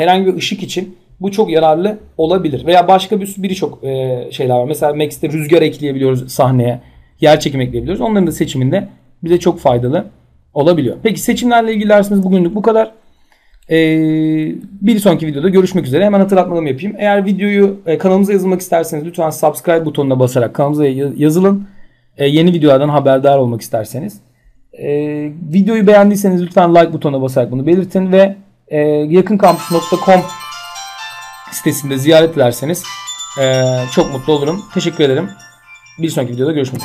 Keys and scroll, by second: 36.3 F10.